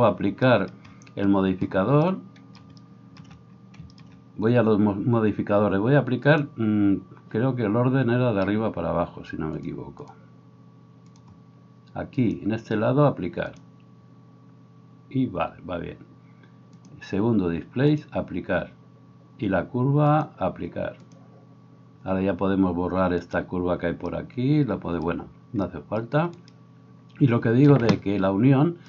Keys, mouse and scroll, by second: 6.4-9.7 drag, 9.7 middle click, 10.1-28.8 drag, 26.3 right click.